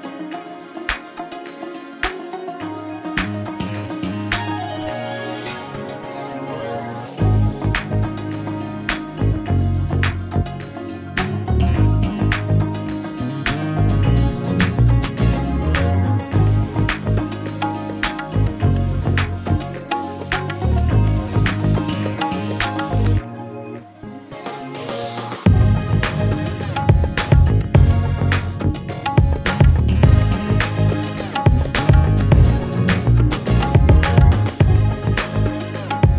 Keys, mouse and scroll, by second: 0.1 click, 2.1 middle click, 2.5 middle click, 3.8 click, 4.4 middle click, 6.0 middle click, 7.9 click, 8.3 click, 9.9 click, 10.5 click, 11.8 alt+middle click, 12.4 click, 13.1 click, 13.8 alt+middle click, 14.4 click, 15.1 click, 15.7 alt+middle click, 16.3 click, 16.9 click, 17.7 middle click, 17.7 middle click, 17.8 middle click, 17.8 middle click, 17.9-18.3 scroll, 18.3 a, 19.0-20.4 scroll, 19.3 q, 19.5 click, 22.4 click, 23.9 click, 24.4 4, 24.5 Return, 25.4 click, 26.2-27.7 scroll, 27.7 a, 28.0 click, 28.4 right click, 29.6 click, 31.0 click, 31.4-32.2 scroll, 33.4 click, 34.1-34.6 scroll.